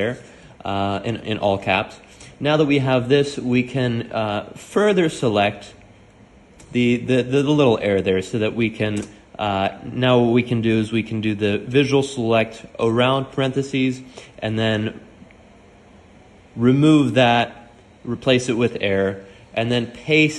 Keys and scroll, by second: 0.6-1.4 typing, 4.6-7.1 typing, 8.9-11.6 typing, 13.8-14.7 typing, 15.9-17.4 typing, 18.4 Escape, 19.4 shift+o.